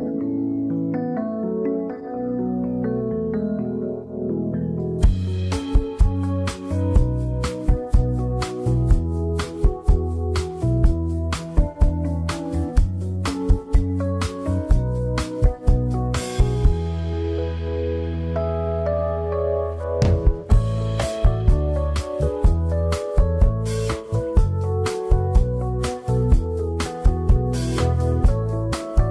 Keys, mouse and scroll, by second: 0.0 shift+a, 2.6-5.0 drag, 5.7 s, 7.8 s, 9.2 s, 10.8 s, 12.8 s, 17.8 shift+d, 18.6 r, 21.9 shift+click, 22.3 scroll up 1, 22.5 Tab, 24.4 z, 25.1-26.0 scroll up 4, 26.0 1, 26.3 z, 27.5 z, 28.2 scroll up 2, 28.7-29.1 shift+middle drag.